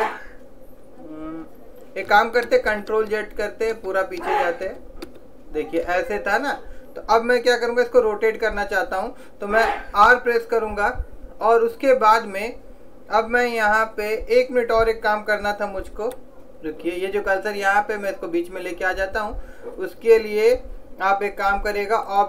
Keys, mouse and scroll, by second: 2.6 ctrl+z, 2.9 ctrl+z, 3.1 ctrl+z, 3.9 ctrl+z, 4.8 ctrl+z, 5.2 ctrl+z, 10.0 r.